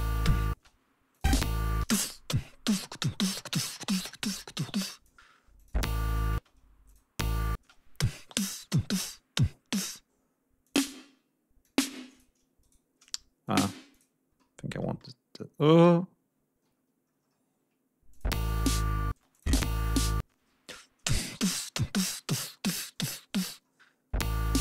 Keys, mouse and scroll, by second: 0.5 space, 1.1 click, 1.1 space, 3.0 scroll down 2, 4.0 click, 5.5 click, 5.6 space, 6.3 space, 6.8 click, 7.1 space, 10.5 click, 11.5 click, 12.5 shift+right click, 13.4 click, 13.6 g, 13.8 click, 14.3 click, 14.9 click, 15.8 ctrl+scroll down 2, 16.4 ctrl+scroll up 2, 16.7-17.4 ctrl+scroll down 6, 18.0 click, 18.2 space, 18.3 scroll up 2, 19.0 space, 19.2 click, 20.1 space, 22.3 click, 22.7 ctrl+scroll down 2, 22.9 ctrl+scroll up 2, 24.1 space.